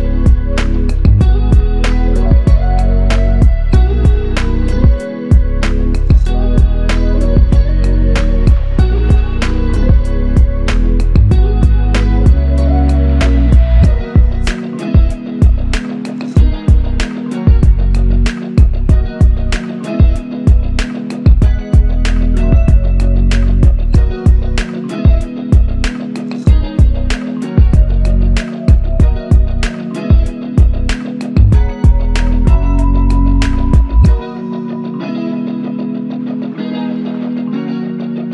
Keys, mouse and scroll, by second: 6.6 ctrl+click, 9.8 ctrl+click, 11.2 ctrl+click, 12.6 ctrl+click, 15.0 double click, 17.0 alt+click, 18.1 alt+click, 18.8 ctrl+click, 22.6 double click, 26.9 alt+click, 29.4 double click, 32.7 ctrl+alt+click, 33.6 alt+click, 38.2 double click.